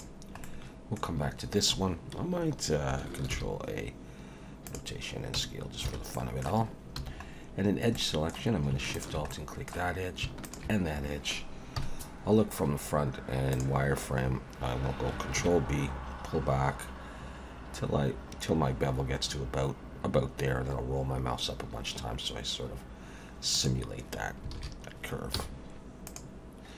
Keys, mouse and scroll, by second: 0.4 middle click, 3.3 ctrl+a, 5.4 Tab, 5.9 alt+a, 6.1 middle click, 7.0 2, 7.1-7.9 scroll up 3, 7.9 middle click, 8.9 alt+shift+click, 9.3 middle click, 10.4 alt+shift+click, 11.8 KP_1, 13.5 click, 15.4 ctrl+b, 24.5 alt+a, 25.3 z.